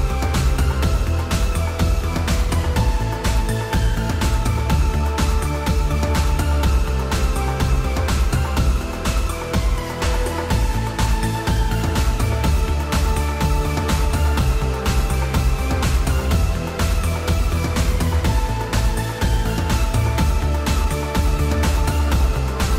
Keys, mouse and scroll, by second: 1.3 drag, 1.8 shift+drag, 1.8 shift+middle click, 2.0 shift+middle drag, 2.9-3.4 shift+drag, 8.4-9.1 drag, 9.9-10.3 shift+drag, 11.3 click, 12.0 g, 17.6 drag, 18.2 click, 19.1 click, 21.2 click, 21.6-22.0 middle drag.